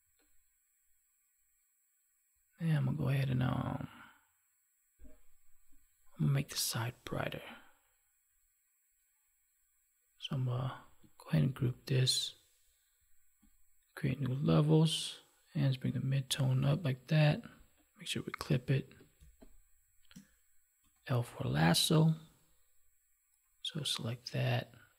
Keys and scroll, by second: 11.5 ctrl+g, 19.2 space.